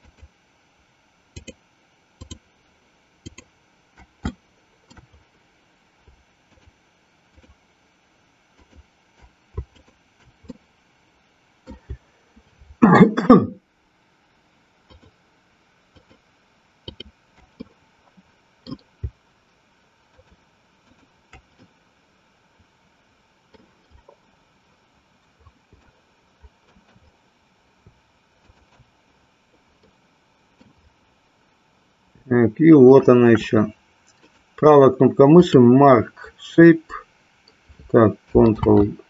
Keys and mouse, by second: 0.0 shift+click, 1.4 shift+click, 2.3 shift+click, 3.2 shift+click, 4.4 shift+middle click, 7.3 shift+click, 8.5 shift+click, 9.7 shift+click, 10.5-11.8 middle drag, 14.9 shift+click, 15.8 shift+click, 17.7-18.8 middle drag, 20.0 shift+click, 20.9 shift+click, 21.7-23.7 middle drag, 25.9-26.9 shift+middle drag, 28.5 shift+click, 29.9 middle click, 34.3-35.5 right drag.